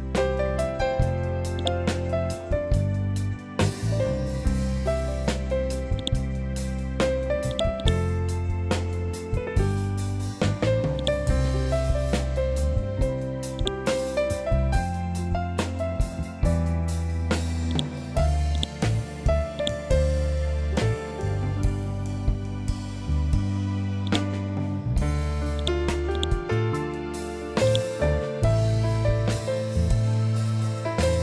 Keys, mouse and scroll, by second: 1.0 right click, 5.4 click, 7.3 right click, 10.4 click, 13.1-31.2 drag.